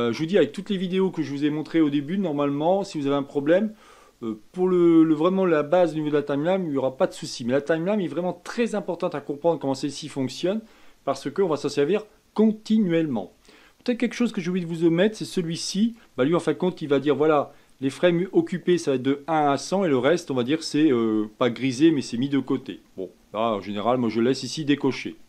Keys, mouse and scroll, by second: 16.1 click, 24.6 click.